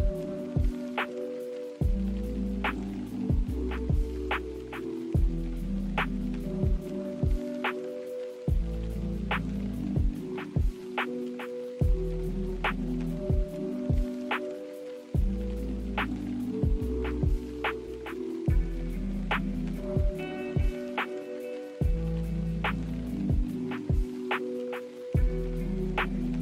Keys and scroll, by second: 10.0 z, 16.9 n.